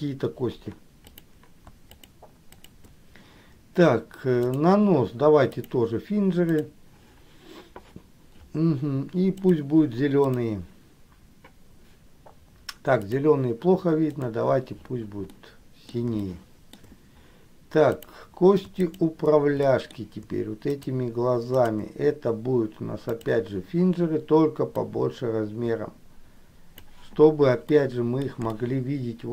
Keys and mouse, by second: 1.2 click, 2.1 shift+click, 2.7 shift+click, 4.5-6.0 drag, 6.6 click, 10.5 click, 15.4 middle click, 16.3 shift+middle click, 18.0 click, 19.1 shift+click, 19.7 middle click, 20.8 shift+click, 21.7 shift+click, 23.2 click, 25.1-27.0 drag, 27.8 middle click, 28.7 shift+middle click.